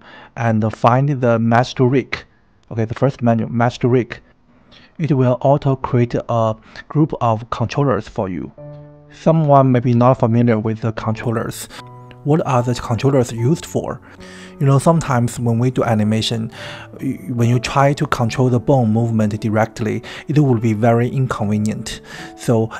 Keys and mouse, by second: 0.4 click, 0.8 click, 3.4 click.